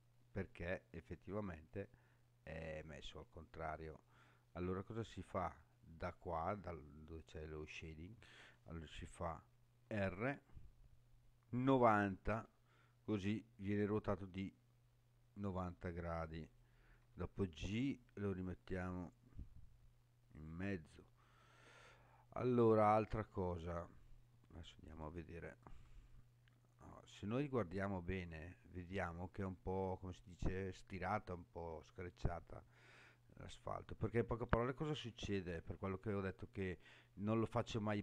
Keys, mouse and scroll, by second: 4.3-5.0 scroll down 3, 9.8 r, 11.9 9, 12.3 0, 16.4 click, 17.0 g, 20.3 click, 21.1-22.2 scroll down 6, 23.1-23.5 scroll up 5, 25.0 shift+middle click, 26.1-26.5 scroll up 3, 27.1-27.7 scroll up 5, 28.3-29.5 scroll up 5, 29.5-30.5 scroll down 4, 30.5-31.8 scroll down 4, 31.8-33.1 scroll down 5, 33.1-33.8 scroll down 4, 33.8-34.6 scroll up 7, 36.5 scroll down 2, 37.1-37.6 scroll down 4.